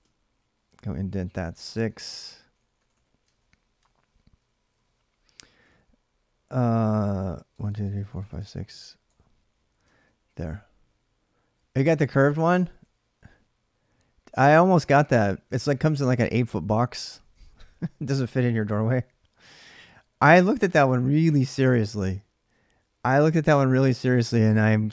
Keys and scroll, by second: 0.0-5.0 typing, 6.3-10.6 typing, 11.7-13.1 typing, 14.5 ctrl+[, 14.6-17.1 typing, 19.3-20.7 typing, 24.4 ctrl+[, 24.5 j, 24.7 j.